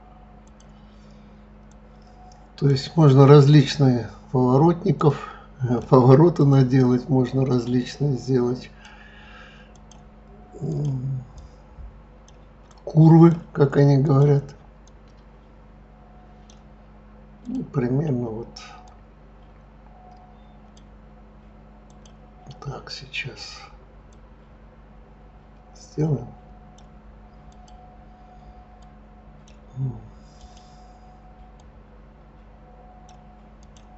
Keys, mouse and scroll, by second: 0.4 click, 1.7 click, 3.5 click, 4.9 click, 6.3 click, 7.4 click, 9.7 click, 10.7 click, 11.3 click, 12.6 click, 12.8-14.0 right drag, 14.0 click, 14.8 click, 17.4 click, 18.8 click, 21.9 click, 24.1 click, 27.5 click, 28.8 click, 28.9-30.4 right drag, 30.4 click, 31.5 click, 33.6 click.